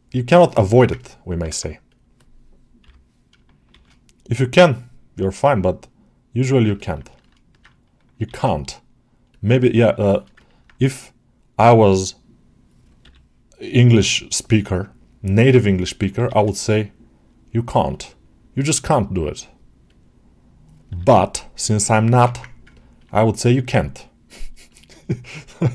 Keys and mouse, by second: 0.6 alt+shift+middle click, 0.8 ctrl+alt+middle click, 1.2 middle click, 4.4-6.5 drag, 6.6 ctrl+alt+middle click, 7.0 shift+middle click, 9.9 shift+middle click, 10.2 ctrl+alt+middle click, 15.3 click, 17.8-19.8 drag, 22.2 ctrl+Tab, 22.6 ctrl+alt+middle click.